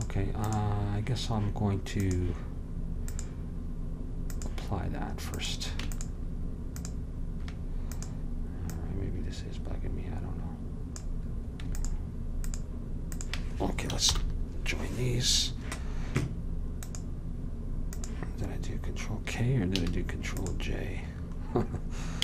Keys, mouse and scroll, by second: 0.0-10.5 drag, 11.9-15.1 drag, 14.2 ctrl+j, 14.2 ctrl+k, 16.9 click, 17.4-18.8 drag, 19.9 a, 20.5-22.2 drag.